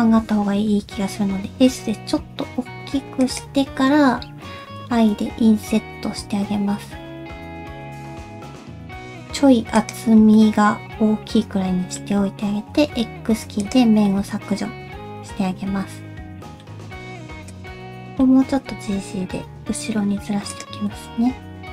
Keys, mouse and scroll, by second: 0.9-2.4 scroll up 1, 0.9 s, 10.4 middle click, 10.4-11.5 scroll down 1, 12.7 x, 14.1 middle click, 16.8 middle click, 16.8 scroll down 2, 16.9 click, 17.5 shift+click, 17.9 shift+middle click, 18.5 g, 20.9 middle click.